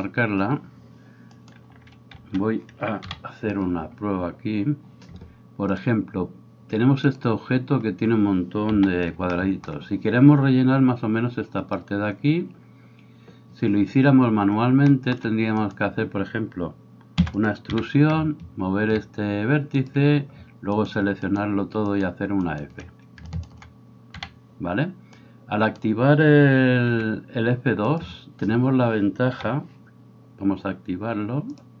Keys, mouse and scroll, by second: 0.0-2.3 drag, 1.3-2.3 right drag, 2.2 alt+g, 2.3-3.2 middle drag, 3.1 KP_7, 3.2-8.8 drag, 3.2-8.8 right drag, 4.0-15.8 middle drag, 8.8 a, 9.2 shift+click, 9.2 shift+right click, 11.8-15.2 drag, 11.8-15.2 right drag, 15.8-17.5 drag, 17.2-22.0 middle drag, 17.2 e, 17.7 g, 21.3 shift+right click, 22.0 shift+right click, 22.1 shift+middle click, 22.5 shift+right click, 22.6-31.8 shift+middle drag, 23.4 shift+right click, 24.2 f, 25.3 right click, 26.9 g, 29.3 a.